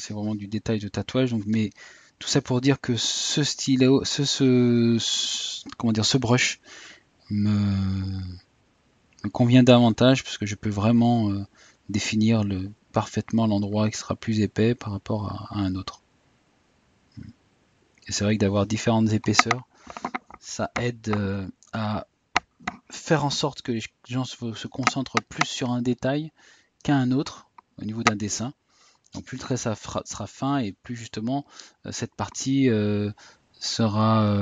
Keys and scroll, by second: 25.2 Tab, 28.1 Tab.